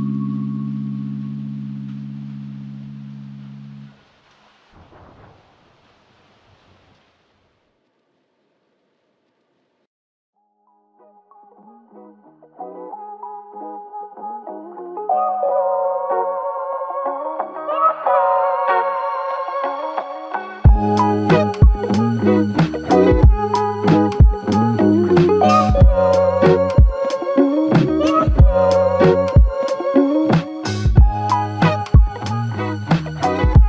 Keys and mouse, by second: 5.0 ctrl+click, 6.7 ctrl+click, 16.5 ctrl+click, 20.6 f, 20.8 alt+click, 25.6 double click, 27.6 alt+click, 29.4 typing, 30.4 typing.